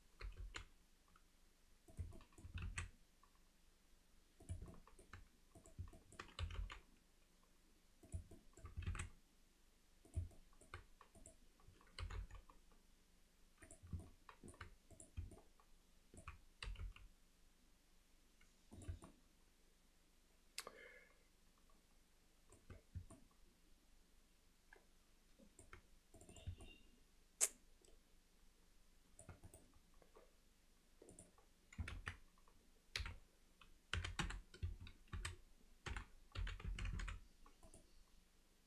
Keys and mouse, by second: 0.3 g, 2.2 alt+middle click, 2.6 alt+s, 4.7 alt+middle click, 6.0 middle click, 6.4 g, 8.4 alt+middle click, 8.9 alt+s, 10.4 middle click, 11.2 click, 12.0 g, 14.1 middle click, 15.4 middle click, 19.1-22.6 alt+middle drag, 23.2-25.6 middle drag, 26.2 click, 26.4 click, 26.7-29.3 alt+middle drag, 32.0 ctrl+z, 33.2 F3, 37.0 e.